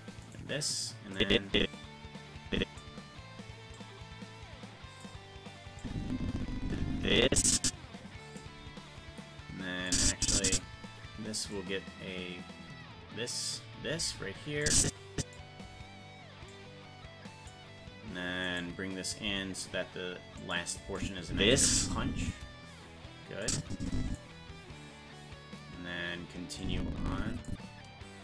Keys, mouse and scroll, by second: 0.4 right click, 1.1-2.8 drag, 3.7-5.0 drag, 5.8-8.4 drag, 9.9 click, 11.5-13.5 drag, 14.6 click, 16.5-17.5 drag, 18.4 right click, 19.2 g, 21.0 click, 21.3 space, 23.4 click, 26.6 click.